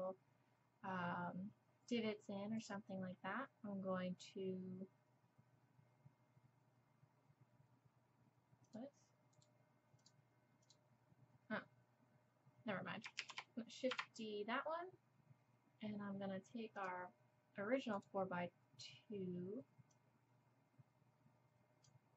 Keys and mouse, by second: 9.3-13.2 drag, 10.6-13.2 right drag, 13.2 shift+d, 16.8-18.0 drag, 18.0-19.9 middle drag, 19.9-21.8 drag.